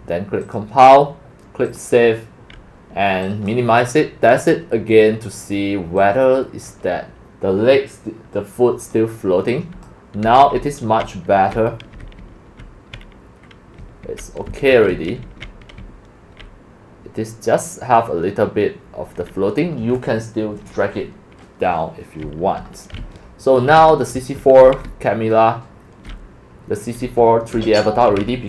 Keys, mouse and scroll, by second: 0.4 click, 1.7 click, 3.2 click, 4.4 click, 6.0 click, 8.8 click, 9.5 click, 9.5-12.2 typing, 9.9 click, 13.8-17.0 typing, 22.0-28.4 typing.